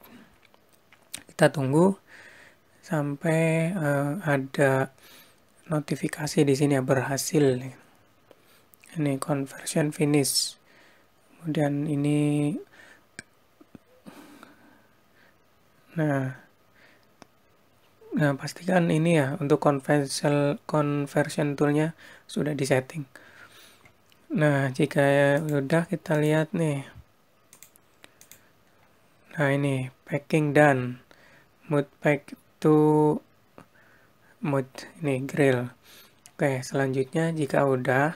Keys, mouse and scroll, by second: 23.2 click, 25.0 click.